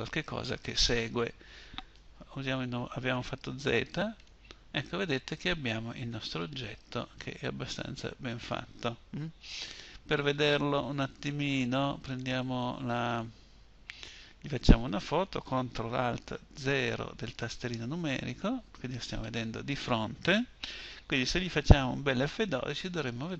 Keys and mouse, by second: 2.7 z, 8.7 KP_7, 16.4 ctrl+alt+KP_0.